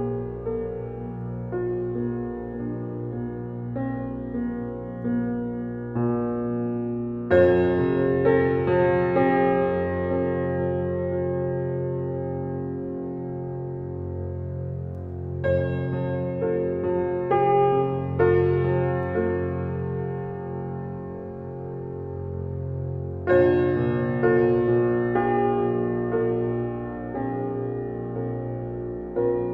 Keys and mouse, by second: 0.2 click, 2.5 click, 3.7 click, 4.6 click, 5.7 click, 7.1 click, 8.7 click, 9.2 click, 10.9 click, 11.5 click, 12.2 click, 13.1 click, 13.7 click, 15.0 click, 15.3 click, 16.7 f, 17.3-18.4 drag, 18.4 f, 19.2 click, 20.5 click, 21.2 click, 22.0 click, 22.6 click, 23.3 click, 23.7 click, 24.2 click, 24.6 click, 26.7 ctrl+alt+click, 28.3 ctrl+alt+click.